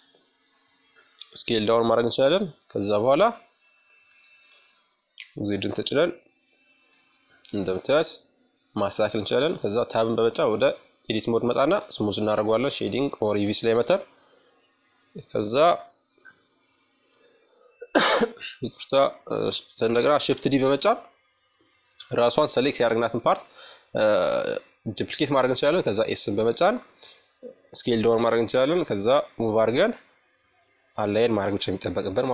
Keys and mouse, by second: 0.5-2.2 middle drag, 1.6 KP_5, 2.6 z, 3.9-5.7 middle drag, 5.7-7.6 drag, 7.1 Tab, 9.3-11.3 drag, 12.4 Tab, 14.0-15.8 drag, 17.9 shift+d, 20.2-22.1 drag, 22.1-24.5 middle drag, 25.6-28.2 drag, 29.1-32.3 middle drag.